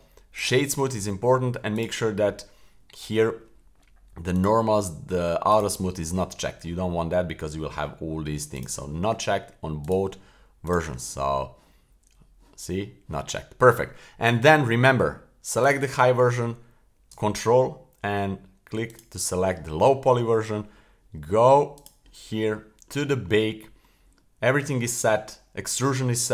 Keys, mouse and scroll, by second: 1.7 click, 3.1-4.3 scroll down 3, 4.3 click, 5.5 click, 8.5 click, 9.8 click, 10.7 click, 14.5 scroll down 1, 15.6 click, 18.9 super+click, 21.7 click, 22.3-24.7 scroll down 9.